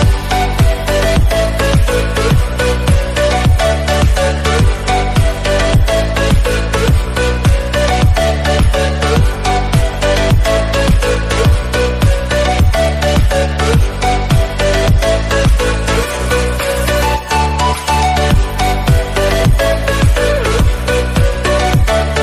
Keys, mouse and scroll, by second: 0.2 click, 1.3 g, 3.2 click, 3.9 g, 9.7 click, 10.1-10.6 scroll down 3, 10.6-11.0 shift+middle drag, 11.0-11.5 scroll up 2, 11.5 g, 18.5 click, 18.7-19.4 scroll down 4, 19.4 scroll down 1, 19.6 KP_7, 20.8 shift+d.